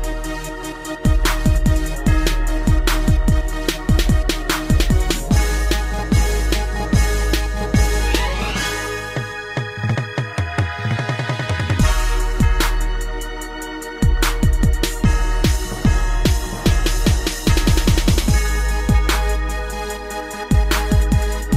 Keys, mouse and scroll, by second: 0.2 click, 1.2 scroll down 2, 1.5 shift+middle click, 1.9 a, 2.4 shift+space, 6.9 click, 7.0 click, 8.0 middle click, 10.7 Escape, 13.1 click, 13.2 click, 13.8 shift+middle click, 14.1-14.4 scroll up 3, 14.7 middle click, 16.0 scroll down 2, 16.2 a, 17.0-17.4 scroll up 3, 17.6 shift+middle click, 17.9 scroll up 2, 18.3 middle click, 18.9 scroll up 1, 19.6 click, 19.7 click, 20.6-21.0 typing, 21.4 click.